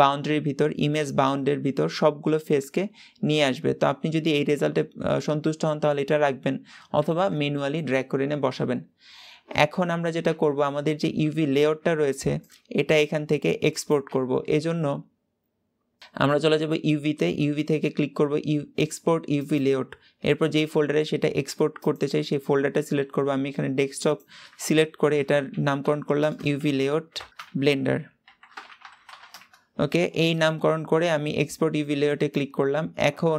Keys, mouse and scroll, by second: 6.9 ctrl+z, 9.7 Tab, 10.1 Tab, 11.1 alt+a, 19.5 click.